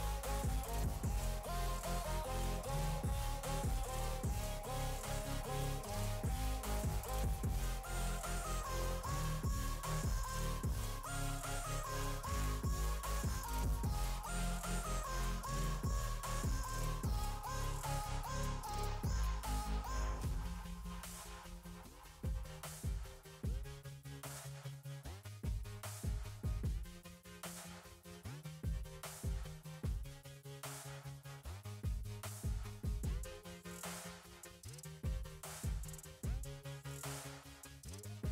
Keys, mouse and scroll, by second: 0.1 click, 1.3 click, 2.4 click, 3.7 click, 5.5-5.9 drag, 6.1 scroll up 3, 6.2 click, 8.3 click, 8.8 click, 9.5 click, 10.1 KP_0, 11.3 click, 13.7 click, 15.7 middle click, 16.6 click, 17.9 click, 19.0 scroll down 2, 19.6 click, 19.9 click, 20.6 click, 21.3 click, 21.8 click, 22.7 KP_0, 23.3 click, 23.4 s, 23.9 click, 24.2 s, 25.0 g, 25.8 click, 26.8 click, 28.0 click, 29.1 click, 29.7 scroll up 1, 30.9 click, 31.9 click, 34.3 click, 35.4 click, 36.9 click, 38.2 click.